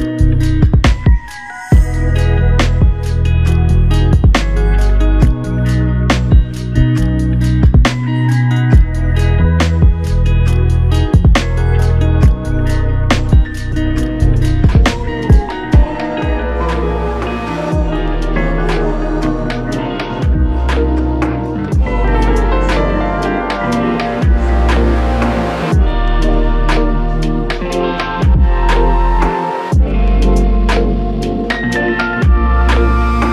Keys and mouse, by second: 2.4 double click, 8.5 double click, 11.4 double click, 16.2-17.0 typing, 21.1 double click, 23.8 click, 24.1 alt+click, 26.0 double click, 29.9-31.6 typing.